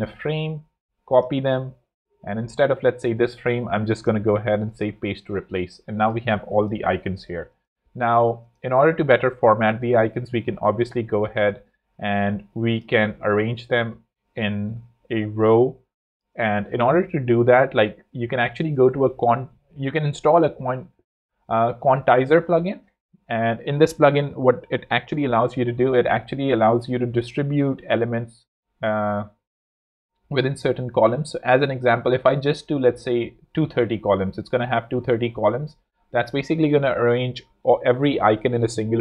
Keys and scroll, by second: 0.6 alt+super+c, 2.2 alt+z, 16.8 shift+super+p, 17.3 super+p, 17.7 super+q, 18.9 Down, 21.7 Return.